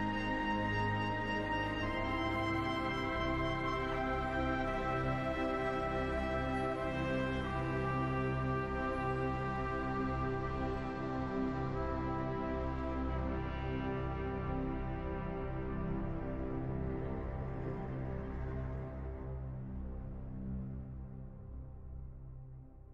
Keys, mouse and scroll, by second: 1.1-2.8 drag, 2.8-5.5 middle drag, 5.5-8.2 drag, 8.4-9.8 middle drag, 9.8-11.1 drag, 11.1-14.0 middle drag, 14.0-17.2 drag, 17.2-18.5 middle drag, 18.5-22.2 drag, 22.2-22.9 middle drag.